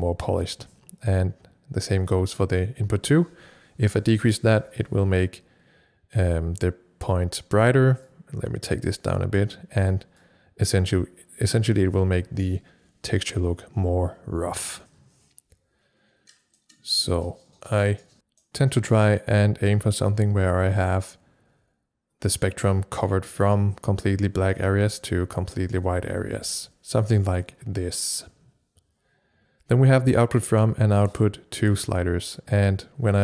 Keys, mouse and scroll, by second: 4.0-23.3 drag, 4.1 c.